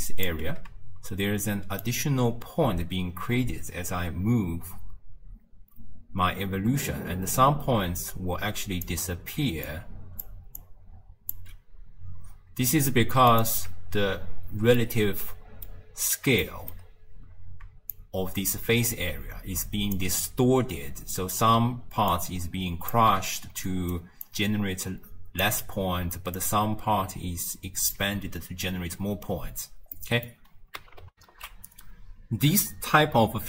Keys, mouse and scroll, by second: 0.4 d, 1.9-4.9 shift+drag, 9.4 d, 9.7 click, 10.3 d, 10.6 click, 11.4 d, 11.5 d, 13.4 alt+shift+click, 14.8-15.8 middle drag, 15.8 scroll up 2, 16.5-18.0 shift+middle drag, 18.0-21.0 shift+drag, 21.5-24.3 typing, 22.2 click, 23.7 right click, 24.3-25.5 drag, 25.5 d, 26.0 d, 26.4-28.0 drag, 28.0 d, 28.9 d, 29.3-30.0 scroll down 2, 30.0-31.1 middle drag, 31.1 n, 31.2 ctrl+alt+shift+q.